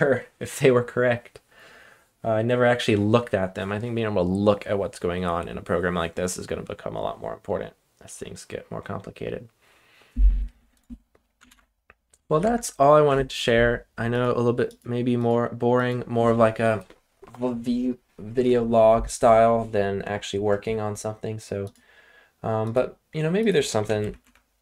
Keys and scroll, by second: 11.5 ctrl+l, 12.4 super+Tab, 24.0-24.6 typing.